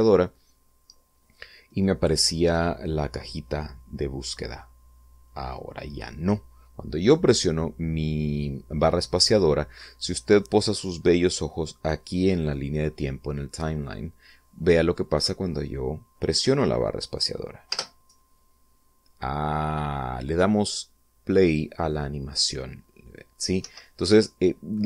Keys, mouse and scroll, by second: 17.6 space, 23.5 Escape.